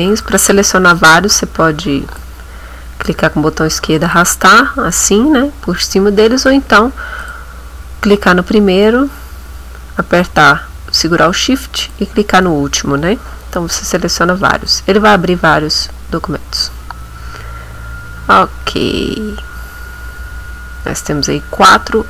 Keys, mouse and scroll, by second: 0.1 click, 0.9-2.4 drag, 3.1-4.3 drag, 6.4 click, 7.2 click, 11.8 shift+click, 14.7 click.